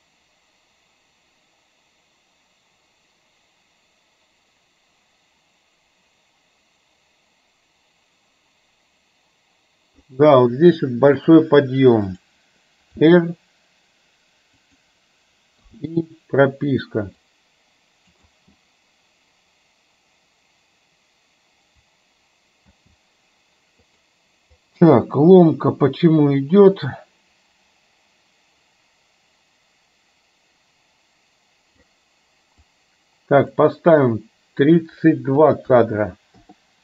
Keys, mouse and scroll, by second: 11.2 click, 13.1 r, 15.7 i, 17.3-18.2 drag, 18.3 space, 22.8 space, 24.1 click, 24.7-31.9 drag, 32.7 click, 34.8-36.6 drag.